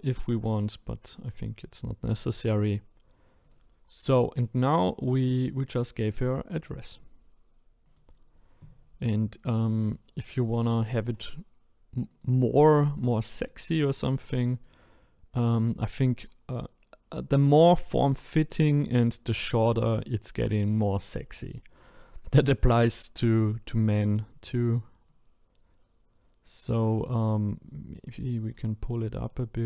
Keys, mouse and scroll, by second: 2.5 click, 3.0-3.4 scroll down 2, 3.4 click, 4.4 middle click, 5.1-5.6 scroll up 3, 5.6-7.8 middle drag, 7.8 click, 8.8-9.6 scroll up 4, 9.6-12.1 shift+middle drag, 12.1 click, 13.3 shift+click, 14.5 click, 16.1-18.1 scroll down 3, 18.1-19.3 scroll down 1, 23.7-25.0 scroll up 4, 25.0 click, 28.4 click, 29.3 click.